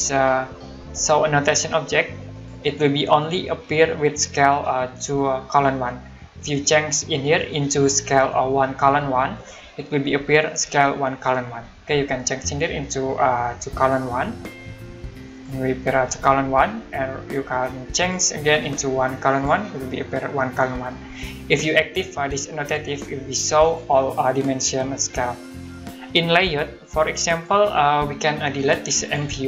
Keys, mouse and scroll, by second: 2.3 click, 7.4 click, 9.3 click, 13.8 click, 15.3 click, 18.0 click, 23.6 click, 27.4 click, 28.3-28.7 scroll down 1, 29.0 click.